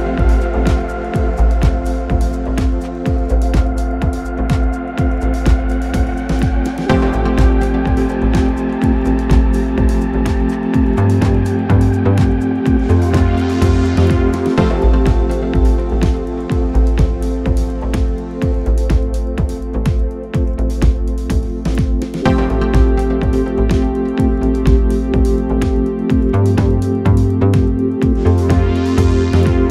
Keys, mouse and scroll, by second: 2.4 g, 5.3 s, 9.3-11.2 drag, 12.7-14.3 drag, 16.5-18.4 drag, 19.4-21.4 drag, 22.2-24.2 drag, 27.2-28.9 drag.